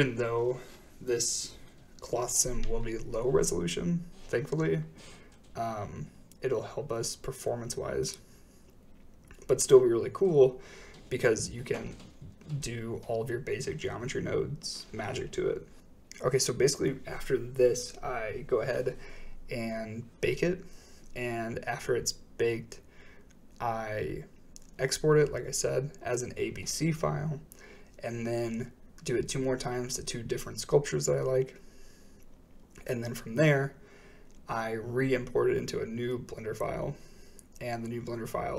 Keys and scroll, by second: 0.0 space, 18.0 typing, 18.4 Return, 25.8-26.6 typing, 26.6 Return, 34.9 typing, 35.1 Return.